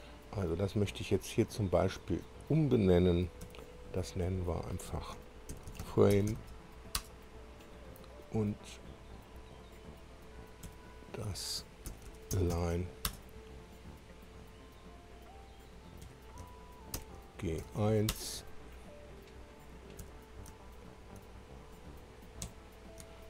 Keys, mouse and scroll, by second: 0.9 click, 2.1 click, 3.4 F2, 5.3-6.8 typing, 7.0 Return, 8.5 click, 10.6 F2, 11.6-13.0 typing, 13.1 Return, 14.2 click, 16.0 F2, 17.0 shift+g, 17.6 shift+1, 18.3 Return, 19.3 click, 20.0 2, 22.4 F2.